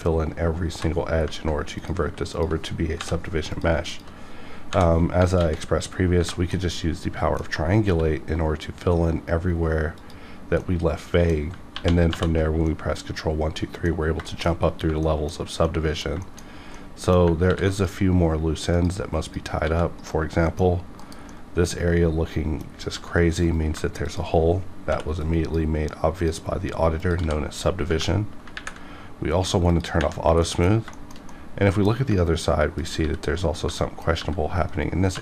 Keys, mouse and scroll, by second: 0.7 j, 1.8 click, 2.1 click, 2.3 shift+click, 3.0 j, 3.5 click, 3.7 click, 3.9 shift+click, 4.7 j, 5.4 alt+x, 6.2 Tab, 6.5-7.9 middle drag, 7.8 q, 10.0 click, 10.6 middle click, 11.3 scroll down 1, 11.7 ctrl+1, 12.1 ctrl+2, 12.7-14.3 middle drag, 14.3 shift+middle click, 14.5 shift+scroll up 2, 15.0 middle click, 15.3 scroll up 1, 15.7 middle click, 16.2 shift+middle click, 16.4 scroll up 1, 16.7 middle click, 16.8 middle click, 17.5 ctrl+r, 17.7 click, 17.8 click, 19.6 g, 20.0 right click, 20.5 middle click, 20.7 scroll up 1, 21.0 KP_Decimal, 21.3-22.7 middle drag, 22.7 scroll up 1, 22.9 g, 23.4 right click, 24.1 shift+click, 24.9 m, 25.2 click, 26.1 click, 27.2 g, 27.5 right click, 28.2 scroll down 1, 28.6 ctrl+`, 29.7 click, 30.2 scroll down 1, 30.4 middle click, 30.9 shift+middle click, 31.2 scroll down 1, 31.3 middle click, 32.2 scroll up 1, 32.8 click, 33.0 g, 33.4 right click, 33.8 middle click, 34.1 g, 34.7 right click, 35.1 2.